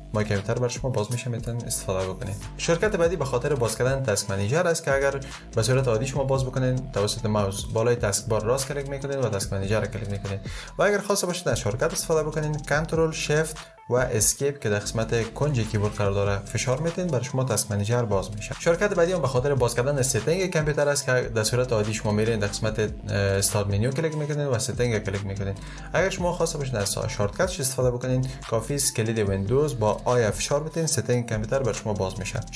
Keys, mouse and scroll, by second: 7.8 click, 13.8 ctrl+shift+Escape, 29.9 super+i.